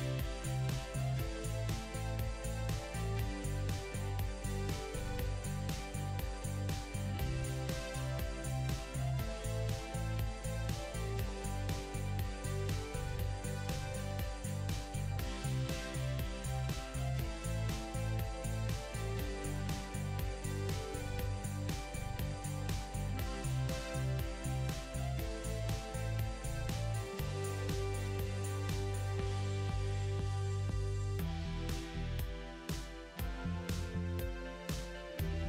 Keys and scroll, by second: 7.5 ctrl+z.